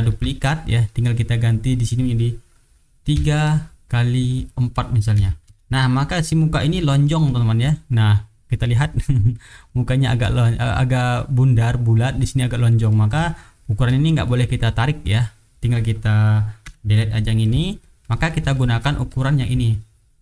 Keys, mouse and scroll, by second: 0.0 ctrl+d, 0.2-1.0 ctrl+drag, 1.5 click, 1.9-3.1 middle drag, 3.1 KP_3, 4.3 click, 4.7 middle click, 5.1 KP_4, 5.4 Return, 7.0 middle click, 7.6-9.1 drag, 9.6 middle click, 12.9 middle click, 13.2 shift+right click, 13.7 shift+right click, 14.0-14.4 shift+drag, 16.6 Delete, 17.0-17.5 middle drag, 17.7 shift+right click, 18.3 shift+right click, 18.5 shift+click, 18.7 shift+middle click, 19.1 shift+middle click.